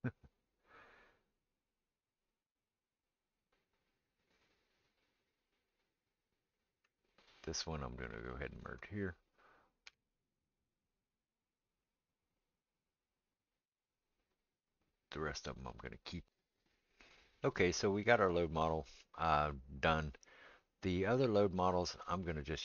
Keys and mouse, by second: 7.6 middle click, 8.5 shift+click, 8.6-22.6 shift+middle drag, 9.8 m, 22.0 click.